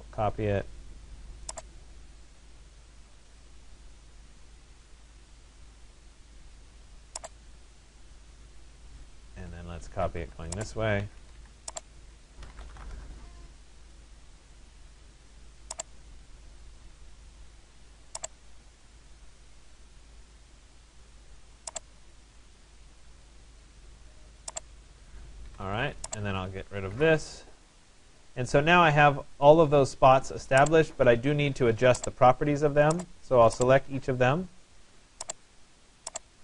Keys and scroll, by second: 9.7 Escape, 13.0 Return, 25.0 Escape, 26.9 Delete.